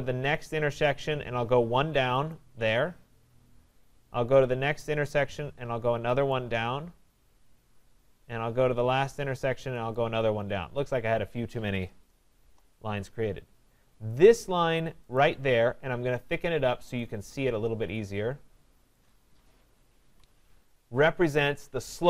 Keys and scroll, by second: 12.3 Return, 20.0 Escape.